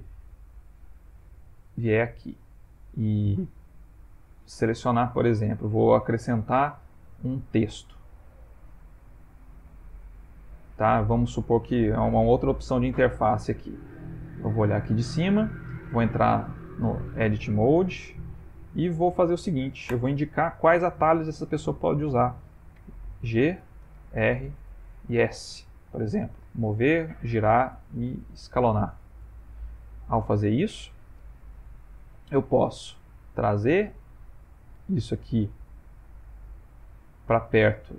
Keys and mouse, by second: 0.6 click, 1.2 middle click, 2.0 middle click, 2.3 middle click, 2.5 middle click, 6.4 shift+a, 14.5 click, 15.9 shift+middle click, 16.7 Tab, 17.9 BackSpace, 18.1 BackSpace, 18.3 BackSpace, 18.4 BackSpace, 22.7 shift+g, 23.5 Return, 24.0 shift+r, 24.5 Return, 25.0 shift+s, 29.2 Tab, 32.1 g, 33.1 s, 34.8 g, 37.4 typing, 37.9 middle click.